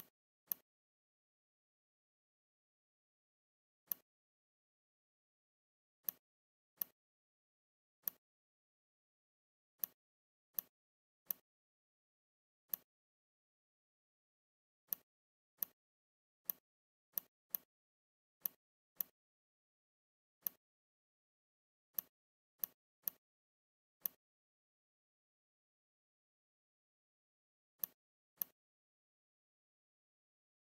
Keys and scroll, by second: 8.6 shift+Escape, 29.0 Delete.